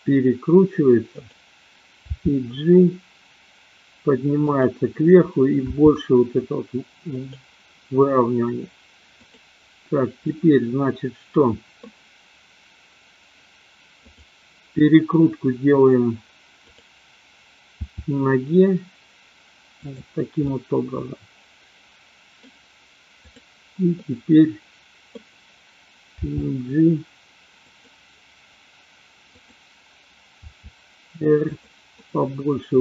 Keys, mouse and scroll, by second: 2.0 g, 4.5 click, 5.8 r, 7.3 click, 10.3-11.9 middle drag, 14.0-14.8 drag, 16.5-17.3 drag, 17.9 r, 20.0 click, 20.4-22.5 middle drag, 23.3-23.9 drag, 24.0-25.3 middle drag, 26.0 g, 29.4-30.0 drag, 30.5 r, 32.0-32.8 middle drag.